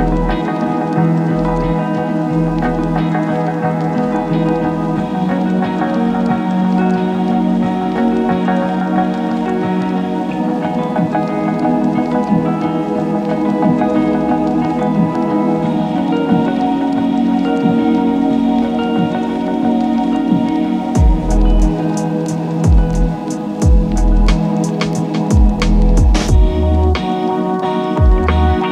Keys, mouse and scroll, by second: 6.0 click, 6.6 space, 13.6 space, 14.9 click, 16.0 ctrl+s, 19.4-20.2 scroll down 1, 20.2-25.3 drag, 28.3-28.7 typing.